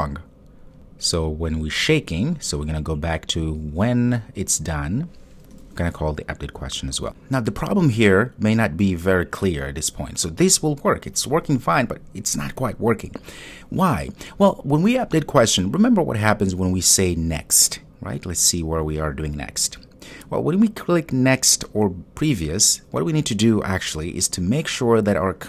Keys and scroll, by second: 5.6 super+v, 7.0 super+s.